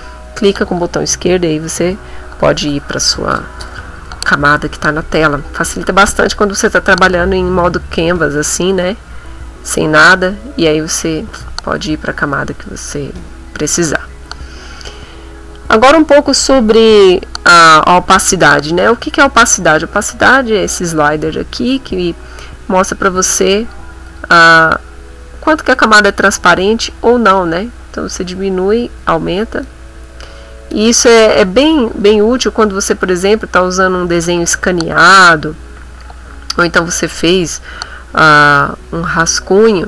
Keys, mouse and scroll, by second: 4.7 ctrl+middle click, 5.4 ctrl+middle click, 6.1 ctrl+middle click, 8.4 Tab, 9.8 middle click, 11.4 Tab, 12.6 middle click, 13.2 middle click, 17.7 middle click, 23.2 click, 24.1 click, 24.9-26.2 drag, 26.6 click, 27.7-29.8 drag, 30.3 click, 32.0 click, 39.0 click.